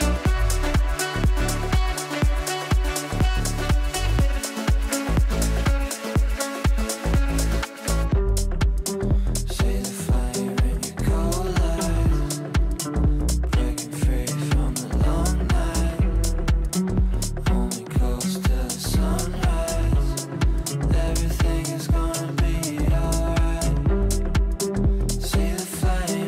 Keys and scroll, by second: 19.7 shift+F2.